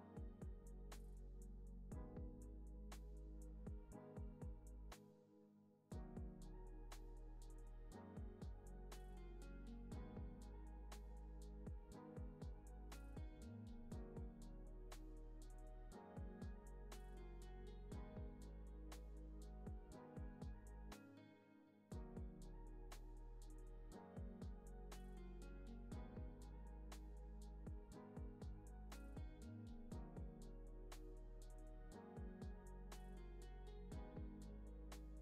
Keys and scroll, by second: 10.1 alt+z, 11.9 alt+x, 19.5 super+s, 27.6 x.